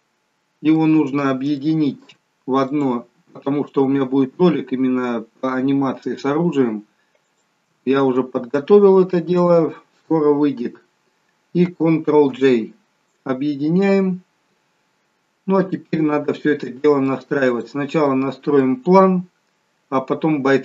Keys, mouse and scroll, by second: 0.0 middle click, 1.7 shift+middle click, 2.7 click, 4.0-4.6 scroll up 3, 5.8-6.9 scroll down 1, 7.4 shift+click, 12.5 ctrl+j, 14.9-15.2 scroll down 4, 16.0 middle click, 16.0 scroll down 2, 17.6 click, 18.2 middle click.